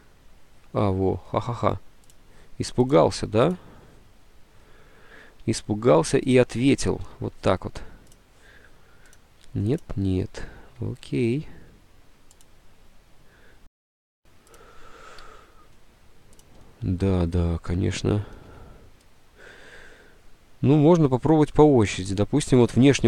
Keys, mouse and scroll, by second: 5.4 alt+Tab, 7.0 Escape, 13.5 Delete, 13.5 space, 15.3 F10, 18.3 space, 18.4 F10, 19.4 space.